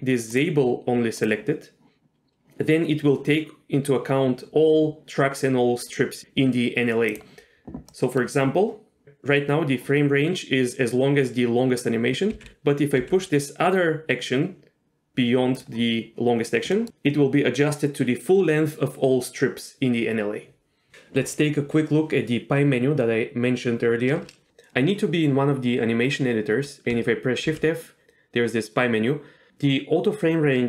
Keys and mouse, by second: 0.4-1.4 drag, 7.1 click, 12.3 g, 12.5 g, 13.0 g, 16.7 middle click.